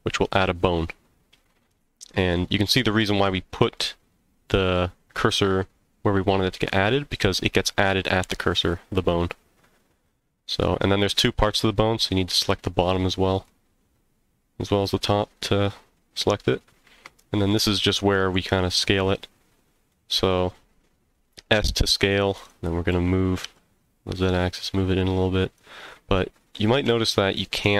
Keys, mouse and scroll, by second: 1.3 middle click, 2.4-3.2 scroll up 2, 3.3 middle click, 4.7 middle click, 6.7 middle click, 8.6 middle click, 10.5 middle click, 11.9 shift+click, 12.9 middle click, 15.3-15.9 scroll down 1, 16.2-17.5 middle drag, 18.4 s, 22.4 click, 22.9 g, 23.4 z, 25.4 click, 26.8 s.